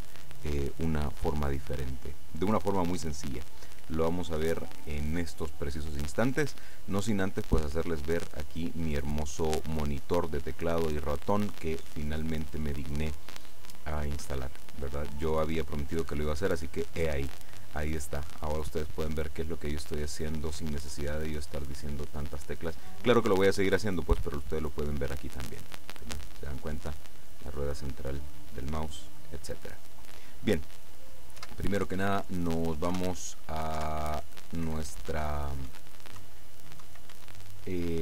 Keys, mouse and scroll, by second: 25.3-31.0 middle drag, 31.6 KP_1, 33.0-37.2 typing.